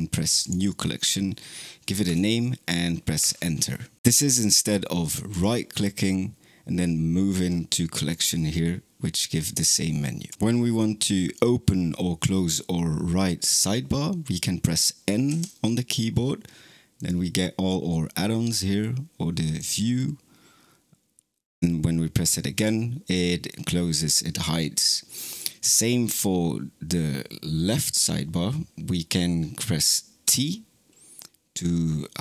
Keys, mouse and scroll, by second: 4.0-8.3 right drag, 15.1 n, 16.8-19.5 drag, 22.4 n.